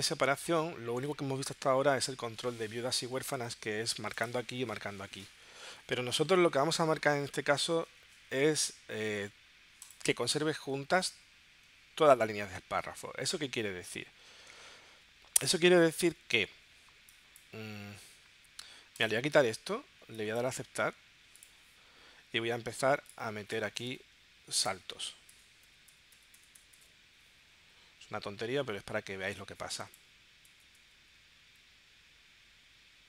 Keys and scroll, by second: 25.2 Return, 25.3 Return, 30.0 Return, 30.5 Return.